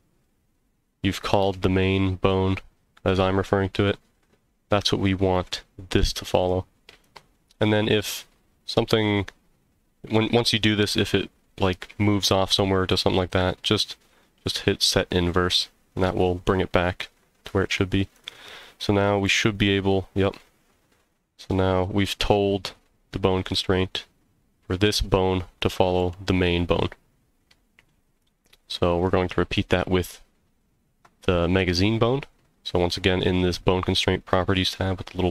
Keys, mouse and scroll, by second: 14.8 click, 18.1 click, 19.2 g, 23.5 right click, 26.0 g, 28.2 right click, 29.0 click.